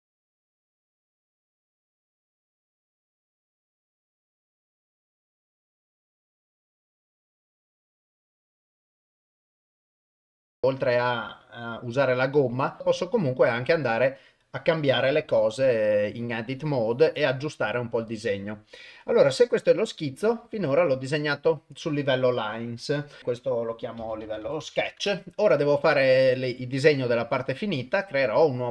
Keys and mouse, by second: 0.0 click, 0.1 click, 0.3 click, 0.6 click, 0.7 click, 0.9 click, 1.2 click, 1.4 click, 1.5 click, 1.6 click, 1.7 click, 1.8 click, 2.0 click, 2.1 click, 2.2 click, 2.5 click, 2.6 click, 2.7 click, 2.8 click, 2.9 click, 3.1 click, 3.3 click, 3.3 ctrl+click, 3.5 click, 3.6 click, 3.7 click, 3.8 click, 3.9 click, 4.0 click, 4.1 click, 4.4 click, 4.5 click, 4.7 click, 4.9 click, 5.0 ctrl+z, 5.0 click, 5.1 click, 5.2 ctrl+z, 5.2 ctrl+z, 5.4 click, 5.4 click, 5.5 click, 5.6 click, 5.7 click, 5.8 click, 5.8 click, 6.0 click, 6.1 click, 6.2 click, 6.5 ctrl+click, 6.7 ctrl+click, 6.8 ctrl+click, 6.8 click, 7.0 click, 7.2 click, 7.3 click, 7.3 click, 7.5 ctrl+click, 7.8 click, 7.9 click, 8.9 ctrl+right click, 9.2 g, 9.4 click, 9.5 click, 9.7 g, 9.9 click, 10.2 ctrl+right click, 10.5 r, 11.9 g, 12.8 Tab, 16.1 click, 16.5 click, 16.8 click, 20.6 click, 23.2-25.0 drag, 27.6 click.